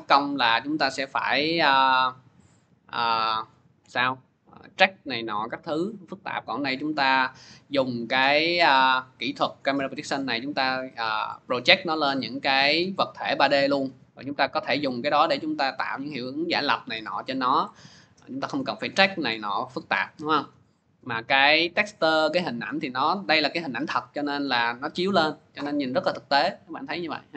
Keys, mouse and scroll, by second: 7.1 click, 8.7 click, 9.7 click, 11.3 click, 12.2 click, 13.7 click, 17.4-18.8 drag, 18.8 click, 19.8 click, 21.2 click, 25.0 click, 27.2 click.